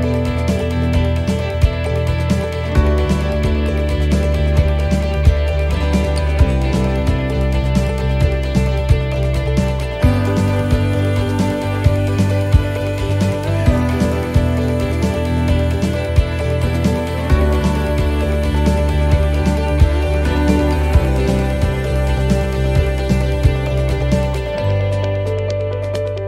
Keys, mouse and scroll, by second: 0.9 scroll down 1, 1.2 middle click, 1.6-2.1 scroll down 2, 2.0 middle click, 2.5-3.0 scroll up 2, 7.9 s, 8.4 middle click, 8.4 scroll down 2, 10.3 l, 11.1 l, 14.4 scroll up 1, 14.4 u, 15.0 middle click, 15.0 scroll up 3, 15.8 scroll down 1, 19.5 alt+s.